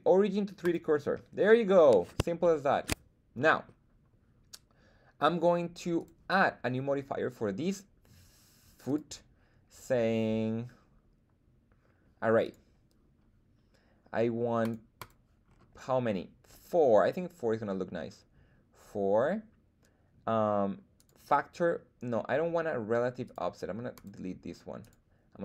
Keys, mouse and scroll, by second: 2.4-2.8 shift+middle drag, 3.3-3.7 middle drag, 5.9 click, 8.8-12.5 drag, 14.6 click, 14.9 click, 15.4-15.8 scroll down 2, 20.9-23.3 drag, 23.9 click, 24.8 drag.